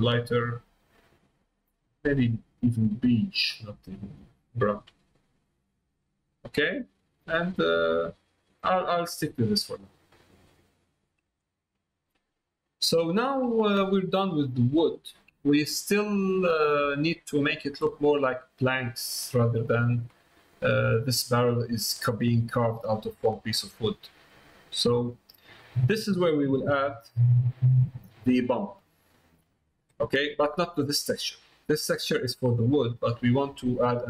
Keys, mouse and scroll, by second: 4.3 middle click, 5.2 middle click, 6.5 middle click, 8.0 middle click, 10.2 middle click, 10.9 middle click, 11.4 shift+middle click, 12.1 middle click, 13.0 shift+middle click, 14.3 middle click, 15.7 middle click, 16.4 middle click, 17.0 shift+middle click, 17.5 middle click, 19.4 middle click, 20.3 middle click, 20.9 middle click, 21.4 middle click, 22.0 middle click, 23.0 middle click, 24.1 middle click, 24.4 middle click, 25.6 middle click, 26.9 middle click, 30.0 middle click, 32.9 middle click.